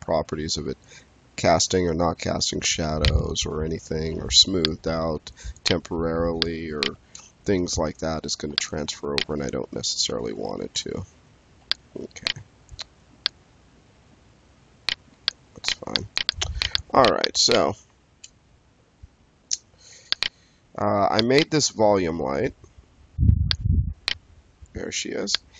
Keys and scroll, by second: 4.0 space, 7.1 space, 10.0 5, 17.8 space, 22.0 space.